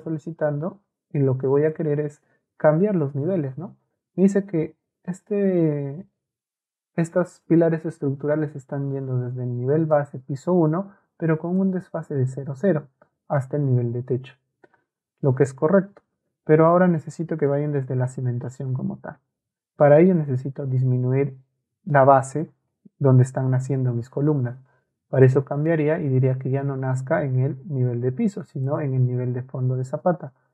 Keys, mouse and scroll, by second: 0.4 ctrl+a, 1.7-2.8 ctrl+right drag, 7.6-9.9 ctrl+drag, 11.6-12.6 ctrl+drag, 14.6 Escape, 25.2-30.5 drag.